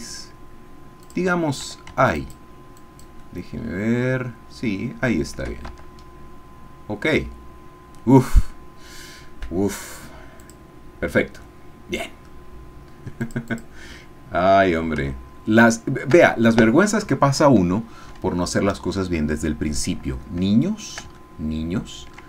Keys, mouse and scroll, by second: 1.0 shift+click, 2.3 shift+click, 2.8 shift+click, 3.2 shift+middle click, 3.8-5.6 shift+drag, 5.8 shift+Tab, 6.1-7.2 scroll down 2, 7.2-8.5 middle drag, 10.4 click, 11.6 click, 13.2 click, 15.1-19.3 shift+middle drag, 19.7-20.4 scroll down 2, 20.7 shift+middle click, 21.3 ctrl+shift+middle click.